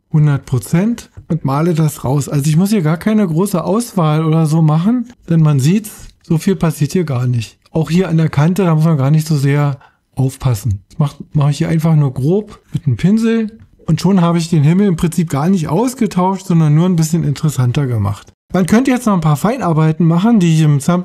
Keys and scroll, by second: 0.3 o.